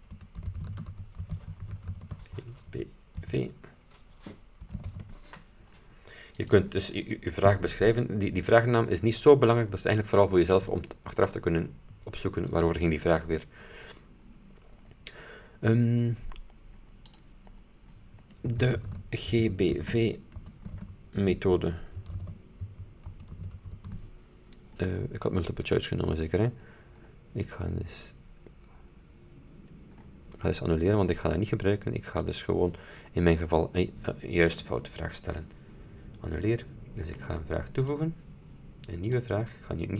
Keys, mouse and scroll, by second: 0.0-5.0 typing, 6.4 click, 14.3-16.0 scroll down 6, 16.5 scroll up 2, 17.2 click, 18.5-24.1 typing, 24.9-25.7 scroll down 4, 26.0-26.6 scroll down 2, 26.7-28.0 scroll up 6, 30.1-31.8 scroll down 2, 32.3 click, 37.9 click, 39.2 click.